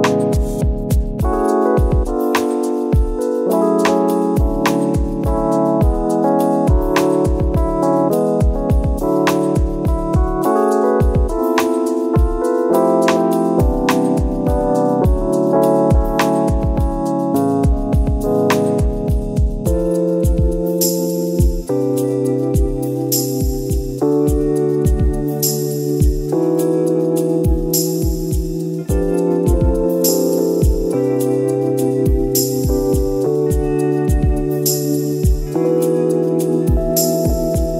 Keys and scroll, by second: 0.5 ctrl+z, 5.8 ctrl+z, 12.5 ctrl+z, 15.3 ctrl+e, 21.1 ctrl+d, 21.4 Delete, 22.8 ctrl+d, 24.5 ctrl+d, 26.6 ctrl+d, 27.5 ctrl+d, 30.4 ctrl++, 30.6 space, 32.8 ctrl+z, 33.2 ctrl++, 33.5 space, 35.4 space, 36.7 space, 37.5 space.